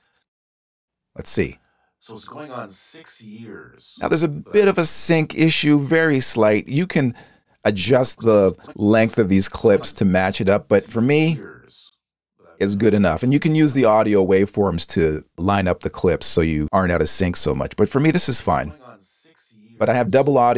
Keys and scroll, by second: 0.7 space, 4.6 space, 11.1 space, 13.2 space, 18.1 space.